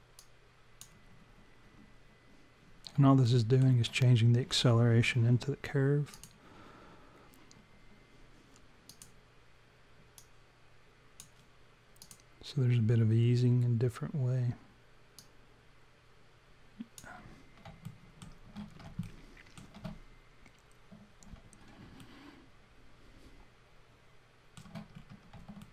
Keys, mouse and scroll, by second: 0.2 click, 3.3 alt+middle click, 6.1 click, 8.9 click, 10.2 click, 12.0 click, 15.2 click, 17.9 alt+middle click, 18.7 scroll down 3, 19.1 alt+middle click, 22.0 alt+middle click, 24.9 scroll up 4, 25.6 alt+middle click.